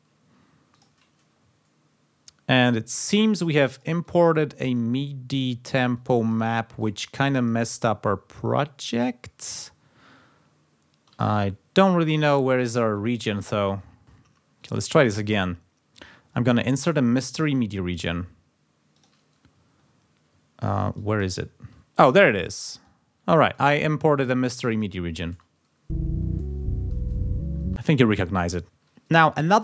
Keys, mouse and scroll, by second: 0.7 click, 1.5-2.3 ctrl+scroll down 4, 3.4 click, 4.0-5.2 drag, 5.9 click, 6.8-7.9 drag, 8.7-9.1 ctrl+scroll up 2, 9.5 ctrl+scroll down 2, 9.9 ctrl+scroll up 2, 10.4 ctrl+scroll down 2, 11.3-12.3 ctrl+drag, 12.6 ctrl+z, 12.9-13.5 ctrl+scroll down 4, 14.0 ctrl+click, 14.0 ctrl+right click, 15.0 click, 15.8 scroll down 2, 16.6 click, 17.4 click, 18.9 click, 20.4-20.8 ctrl+scroll down 2, 20.9 ctrl+click, 21.4 ctrl+scroll up 2, 22.1 ctrl+click, 22.8-23.9 drag, 24.0-24.6 ctrl+scroll up 2, 24.7 click, 25.3 space, 26.6 ctrl+scroll down 2, 27.6 space.